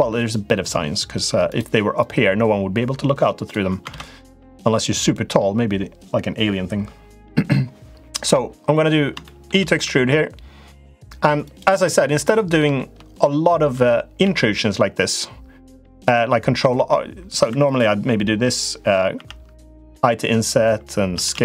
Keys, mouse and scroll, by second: 1.8-3.3 drag, 3.7 ctrl+z, 4.1-5.1 middle drag, 9.0 shift+middle click, 9.6 e, 12.5 shift+middle click, 13.1 middle click, 14.0 ctrl+r, 17.3 3, 17.4 click, 18.9 i, 20.9 s.